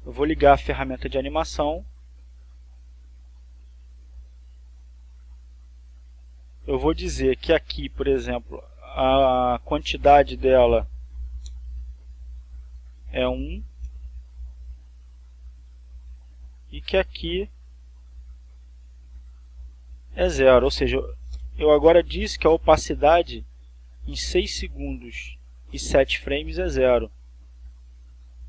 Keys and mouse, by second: 1.2 click, 2.2-7.7 drag, 9.1 click, 10.0 click, 11.4 1, 11.7 ,, 12.0 Return, 13.2 click, 14.0 1, 14.4 Return, 16.1-20.3 drag, 20.7 click, 21.8 0, 21.9 Return, 23.8-28.4 drag.